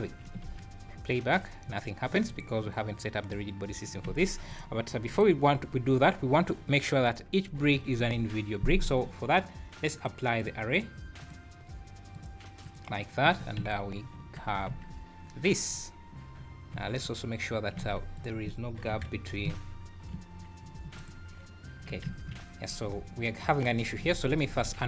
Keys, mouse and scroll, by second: 0.3 space, 0.8 scroll down 2, 1.3-1.6 scroll up 2, 1.7 Escape, 2.0 scroll down 1, 2.3 click, 3.3 click, 4.1 alt+a, 4.5 click, 5.2 click, 7.0 Tab, 7.7 a, 8.7 Tab, 9.9 click, 10.4 click, 10.7 click, 11.2 click, 12.1 click, 13.2 click, 13.3 Tab, 13.6 a, 14.2 Tab, 14.7 Tab, 15.7 scroll up 2, 16.7 3, 16.9 click, 17.8 alt+a, 18.1 click, 18.9 KP_Decimal, 20.1 l, 20.6 scroll down 3, 20.9 click, 22.0 l, 23.1 scroll down 2, 23.7 Tab, 24.1-24.8 ctrl+z.